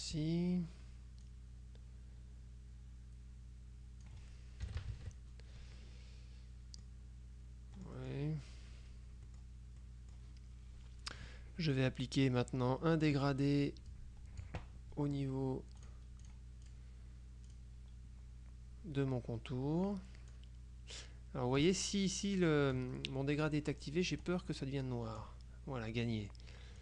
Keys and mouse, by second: 1.3-4.6 drag, 4.7 KP_Subtract, 5.9-7.4 drag, 7.9 click, 9.4 click, 13.1 click, 14.0-15.0 drag, 15.9-17.3 drag, 17.6 click, 20.5-22.2 drag, 24.3-25.8 drag.